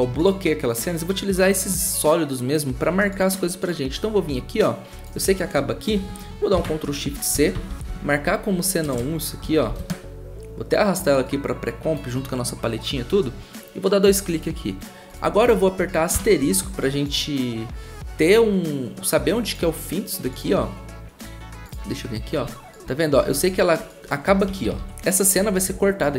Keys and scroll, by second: 6.5 ctrl+shift+c, 7.1-10.1 typing, 16.1 *, 24.4-24.8 typing.